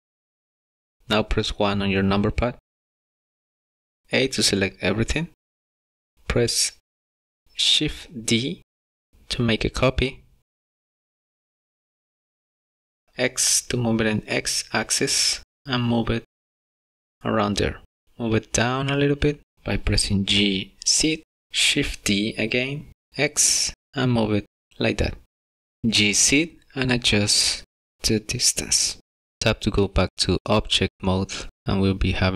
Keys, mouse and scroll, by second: 0.0 click, 1.0 middle click, 1.6 KP_1, 3.3 Tab, 5.0 a, 9.1 shift+d, 16.3-16.6 scroll up 2, 17.0 shift+middle click, 18.3 g, 20.7 scroll down 4, 20.9 shift+middle click, 21.3 shift+d, 26.1 g, 31.6 middle click.